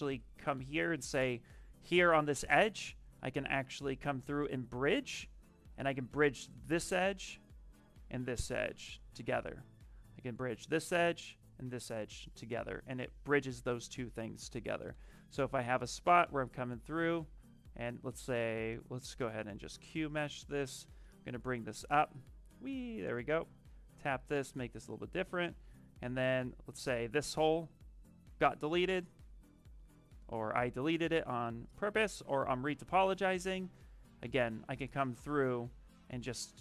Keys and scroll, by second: 1.1 space, 17.5 space, 28.3 space, 34.6 space.